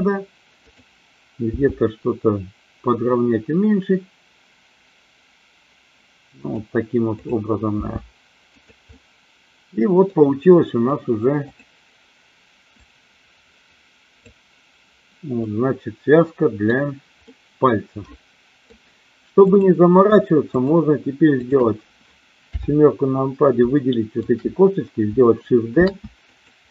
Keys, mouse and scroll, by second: 0.6 click, 1.4 g, 6.3 click, 7.7 g, 8.4 click, 8.8-10.1 middle drag, 10.6 middle click, 11.3 click, 12.7-14.2 drag, 15.4-16.7 middle drag, 17.2-18.6 middle drag, 19.4 click, 20.4 shift+click, 21.4 shift+click, 22.4 KP_7, 23.7 shift+middle click, 25.8 shift+d, 26.2 click.